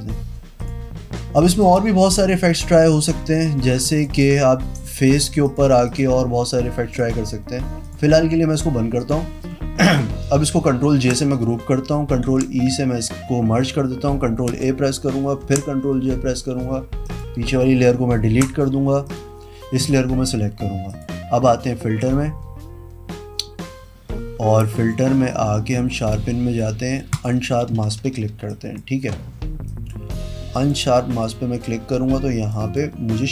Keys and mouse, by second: 0.8 click, 1.7 click, 3.1 click, 4.2 ctrl+alt+right click, 5.3 click, 5.6 click, 6.1 click, 7.2 click, 8.0 click, 8.7 click, 9.2 click, 11.0 ctrl+j, 12.4 ctrl+e, 14.7 ctrl+a, 15.6 ctrl+l, 17.2 click, 18.5 Pause, 19.3 click, 21.1 click, 27.3 click, 28.7 click, 29.9 click, 30.8 click, 32.7 click.